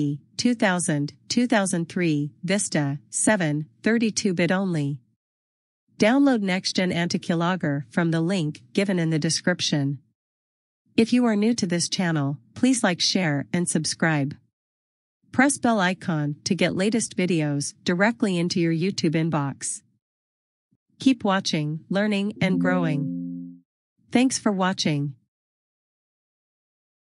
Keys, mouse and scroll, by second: 4.3 click, 9.2 click.